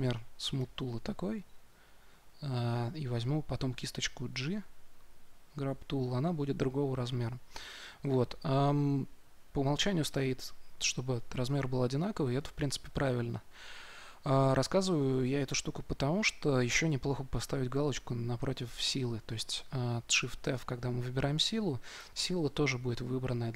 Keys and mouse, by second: 4.2 g, 9.5-11.3 drag, 17.9-20.4 drag, 20.4 shift+f.